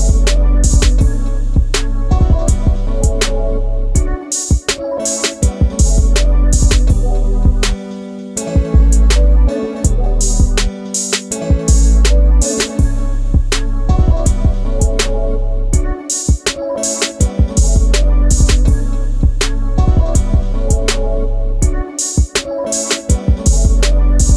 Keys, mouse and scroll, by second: 0.3 shift+middle click, 0.8 m, 1.6 click, 1.8 shift+space, 2.5 space, 3.9 Delete, 5.2 Delete, 6.2 e, 8.6 space, 11.6 shift+w, 12.3 space, 14.0 middle click, 20.6 middle click, 21.2 m, 23.5 click, 23.7 shift+space.